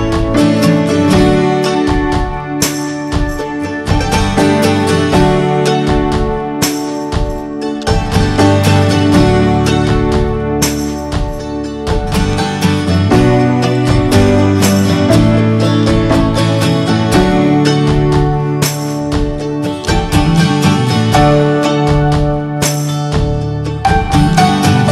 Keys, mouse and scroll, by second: 0.6 middle click, 0.8 scroll down 1, 1.0-2.5 shift+middle drag, 2.8 scroll down 2, 2.9 drag, 3.2 middle click, 3.5 click, 3.8-4.8 middle drag, 4.8 scroll up 1, 5.7 click, 6.2 click, 6.9 click, 7.4-8.0 middle drag, 8.0 click, 8.9 g, 10.0 ctrl+a, 10.3-12.2 middle drag, 12.2 click, 12.5 click, 12.9 click, 13.2 drag, 13.5 drag, 14.6 drag, 14.9-16.5 middle drag, 16.5 ctrl+s, 18.4-19.2 middle drag, 19.2 click, 19.6-20.1 middle drag, 20.1 click, 20.3-21.6 shift+middle drag, 21.6 click, 22.2-22.7 middle drag, 22.7 click.